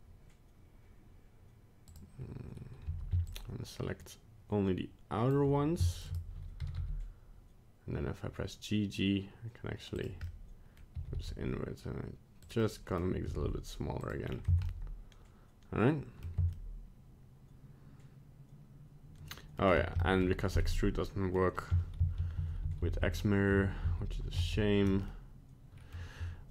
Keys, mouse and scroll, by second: 1.9 click, 2.8 c, 6.6 g, 10.2 middle click, 11.0 g, 12.6 middle click, 13.2 g, 14.2 scroll down 2, 14.5 Tab, 14.7 middle click, 16.4 Tab, 16.6 middle click, 20.0 shift+middle click, 20.6 middle click, 22.1 ctrl+z, 22.4 ctrl+z, 22.7 ctrl+z, 22.8 ctrl+z, 23.0 ctrl+z, 23.8 ctrl+z, 24.4 ctrl+z, 25.0 middle click.